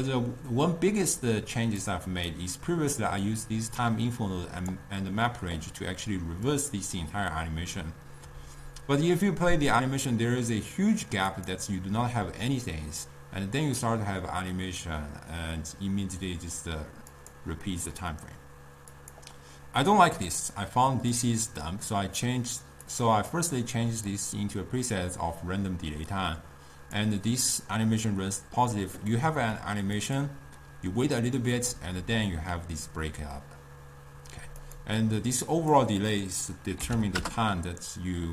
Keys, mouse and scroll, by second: 1.9 click, 3.9-9.7 drag, 11.4-14.5 drag, 17.3-21.3 drag, 22.9 click, 23.4-29.2 drag, 30.1-33.2 drag, 34.8-38.3 drag.